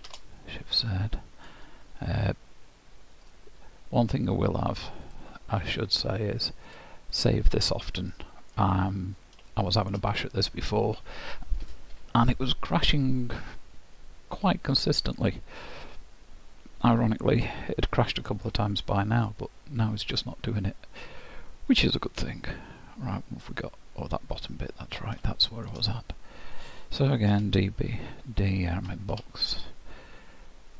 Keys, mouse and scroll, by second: 0.1 shift+z, 0.9 middle click, 1.5-2.0 scroll down 4, 3.2 click, 7.4 click, 8.1 middle click, 8.8-9.4 scroll up 3, 9.5 shift+middle click, 10.3-11.2 scroll down 2, 13.9-14.5 scroll up 3, 14.5-15.1 scroll down 1, 15.1 middle click, 19.3 middle click, 25.3 shift+middle click, 27.4 d.